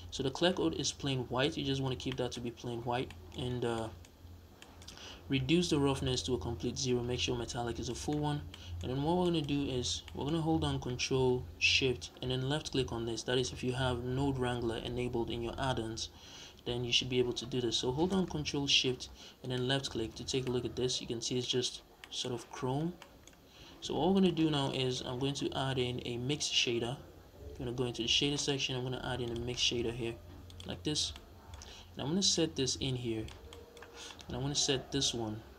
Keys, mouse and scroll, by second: 2.9-19.3 middle drag, 3.4 scroll down 2, 4.1-4.5 scroll up 2, 4.8-5.6 scroll up 2, 5.6-7.2 scroll up 1, 7.2 scroll up 1, 7.5 scroll down 2, 8.2 scroll down 2, 8.8-9.1 scroll down 2, 9.4-9.9 scroll up 2, 19.3 ctrl+shift+click, 20.3-24.0 middle drag, 22.7 scroll down 2, 23.5 scroll down 1, 24.0 ctrl+shift+click, 24.4 scroll up 1, 24.6-30.4 middle drag, 25.3 shift+a, 30.4 click, 30.6 scroll up 1, 31.0-32.2 middle drag, 32.2 drag, 33.4-33.9 middle drag, 34.0-34.9 scroll down 1, 34.9 drag.